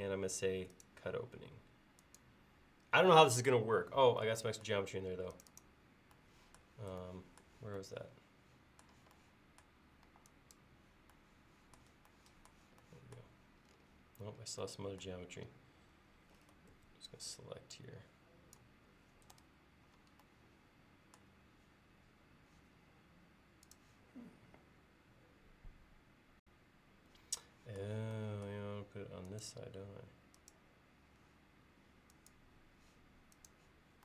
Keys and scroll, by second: 10.1 e, 16.8 space, 19.4 BackSpace.